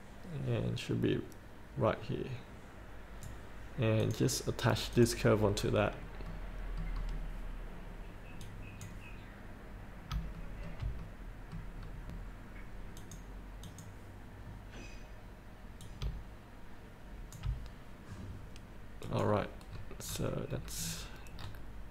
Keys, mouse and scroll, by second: 0.7-3.7 drag, 5.1 click, 5.7-6.5 scroll up 1, 6.5 middle click, 7.4-8.6 scroll down 1, 8.6-9.8 drag, 10.5 shift+middle click, 11.2 middle click, 11.9-13.2 scroll down 1, 13.2 click, 14.9-16.0 scroll down 1, 16.0-17.5 drag, 19.2 click, 19.9-20.3 scroll up 1, 20.7 scroll down 1.